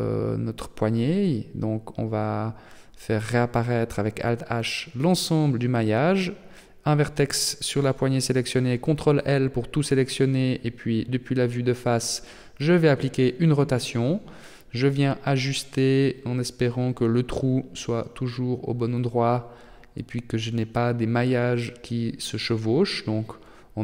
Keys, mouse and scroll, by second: 1.1 right click, 1.4 Tab, 3.0 alt+h, 3.6 middle click, 4.3 right click, 5.6 ctrl+l, 6.6 KP_3, 7.8-8.3 scroll up 3, 8.3 middle click, 9.6 KP_1, 11.4 r, 13.3 g, 16.2 KP_3, 17.5 r, 19.2 g, 21.6 middle click.